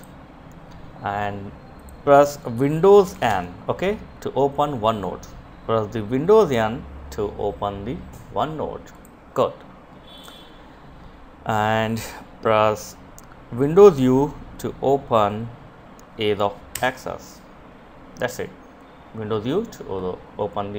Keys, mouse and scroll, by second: 2.8 super+n, 8.4 click, 16.1 super+u.